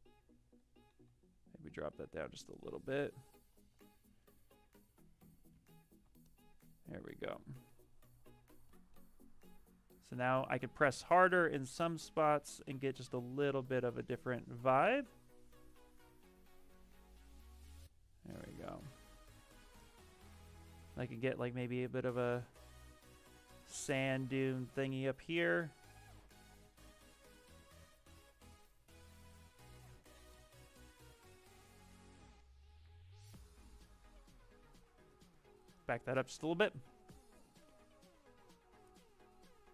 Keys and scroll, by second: 0.9 e, 5.4 s, 20.2 s, 35.6 s.